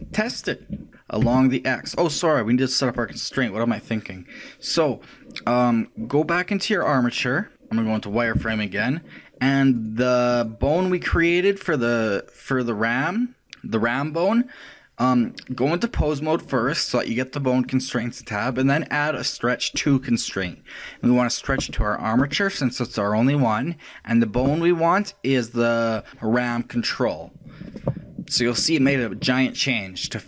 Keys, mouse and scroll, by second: 0.9 ctrl+Tab, 0.9 r, 1.0 ctrl+right click, 3.0 right click, 6.9 click, 8.3 z, 9.7-13.0 right drag, 13.4 click, 17.7-20.5 drag, 21.6 click, 24.5 click.